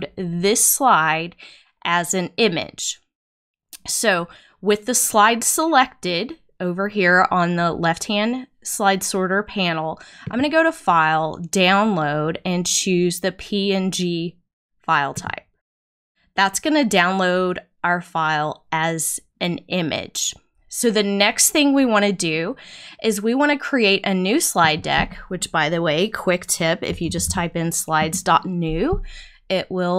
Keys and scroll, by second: 26.6-27.5 typing.